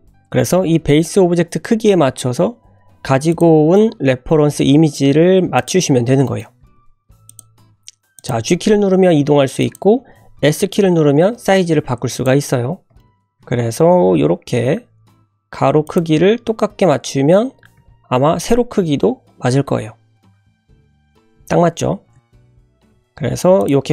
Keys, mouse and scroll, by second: 3.9-4.7 scroll up 1, 4.7 s, 5.8-6.2 scroll up 1, 6.2 shift+middle drag, 6.6 g, 7.6 s, 8.3 g, 12.4-12.8 scroll up 2, 13.0 shift+middle drag, 13.4 g, 17.0 scroll down 2, 17.7 g, 21.9 scroll down 1, 22.1 g.